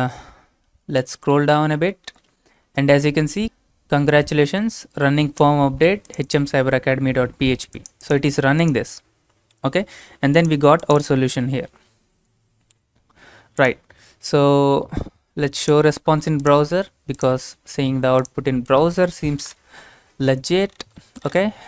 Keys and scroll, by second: 18.9 ctrl+v.